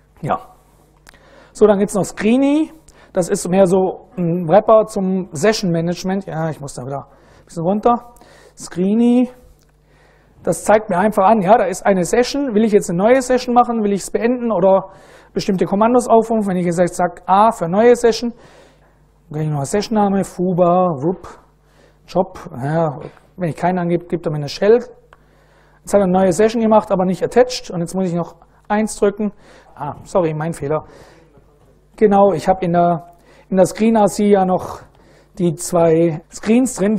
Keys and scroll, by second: 3.4 super+Right, 3.9-5.4 typing, 6.2 ctrl+u, 6.7 Return, 7.0 Return, 7.5-9.0 typing, 9.2 Return, 17.0 a, 17.8 Return, 19.5-21.0 typing, 23.8 Return, 28.3 1, 28.6 Return, 30.1-31.6 typing, 32.3 ctrl+u, 32.8 Return, 33.8-36.1 typing.